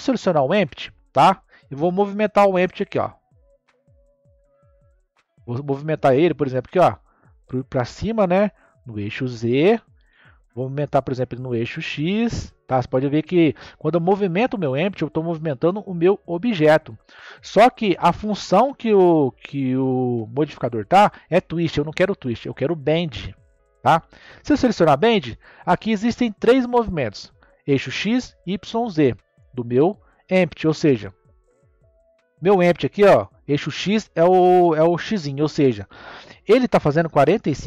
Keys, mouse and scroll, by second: 3.0-6.0 middle drag, 6.2 click, 11.2 click, 12.7-14.2 drag, 18.8 click, 23.6 click, 25.1-25.7 middle drag, 25.7-28.7 scroll down 2, 31.2-34.3 middle drag.